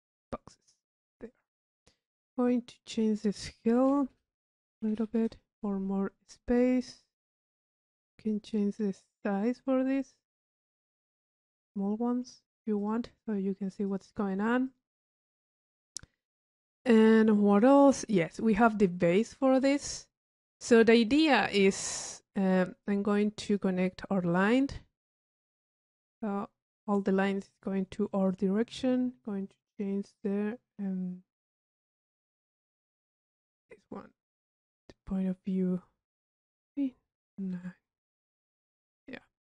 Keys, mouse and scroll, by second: 1.3 click, 2.9 click, 6.5 click, 7.9 click, 8.0-10.4 middle drag, 12.8 click, 13.9 click, 14.7 click, 17.6-18.2 drag, 19.2-20.8 drag, 21.1 click, 21.6 right click, 22.4-23.4 drag, 23.5 click, 24.6-25.5 drag, 28.3 click, 34.6 middle click, 35.1 click, 39.0 click, 39.4 middle click.